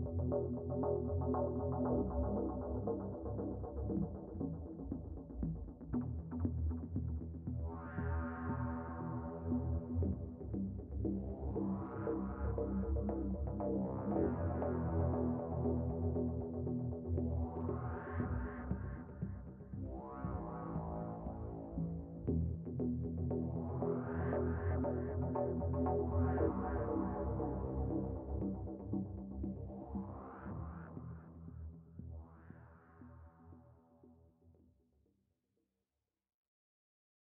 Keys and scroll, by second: 16.1 alt+w, 16.6 alt+w.